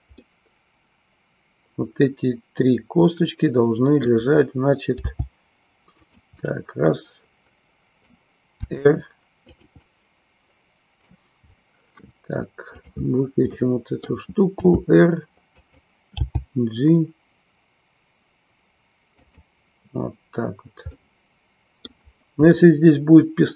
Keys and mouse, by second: 0.1-4.3 middle drag, 6.1 click, 6.5-8.1 middle drag, 9.6 click, 9.9-11.1 middle drag, 13.5 middle click, 19.2 click, 20.9-22.0 middle drag, 22.5-23.5 middle drag.